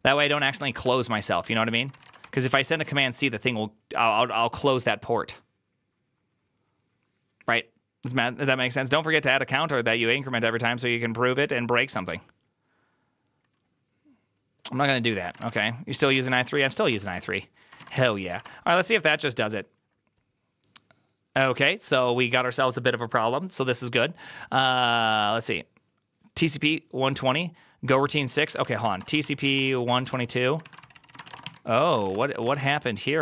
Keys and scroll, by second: 0.0-2.6 typing, 2.6 Return, 2.7 ctrl+u, 15.0-17.8 typing, 16.3 Return, 16.3 ctrl+d, 17.6 Return, 17.6 ctrl+a, 18.0 ctrl+c, 18.1 ctrl+c, 18.2 Up, 18.3 Return, 28.1-33.2 typing, 30.6 ctrl+c, 30.8 ctrl+c.